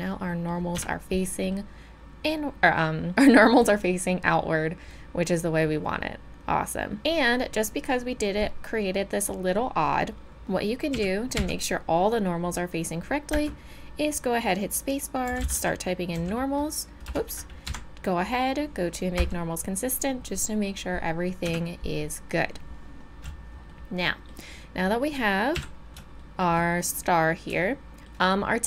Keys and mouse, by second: 0.8 Tab, 10.4 Tab, 10.9 a, 11.4 a, 13.3 space, 21.5 Tab, 25.5 KP_7.